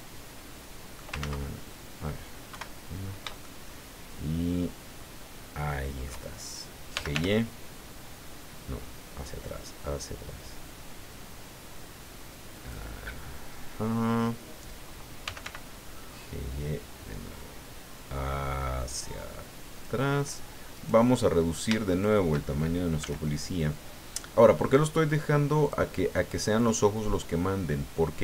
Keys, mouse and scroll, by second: 1.2 ctrl+z, 2.5 KP_1, 3.4-6.2 shift+drag, 6.7-7.6 typing, 12.5 click, 15.0-15.9 typing, 19.7 click, 20.7 right click, 21.9 shift+right click, 23.0 s, 25.6 click, 26.5-28.2 drag.